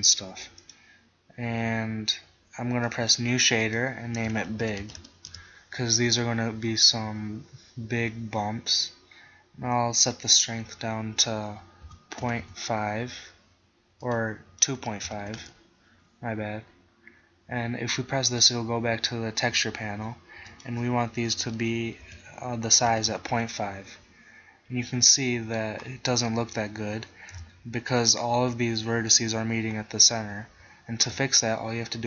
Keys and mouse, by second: 2.9-5.5 drag, 10.1-12.0 drag, 14.1-16.0 drag, 18.4-20.2 drag, 20.5-22.3 drag, 27.4 KP_1, 31.0 Tab.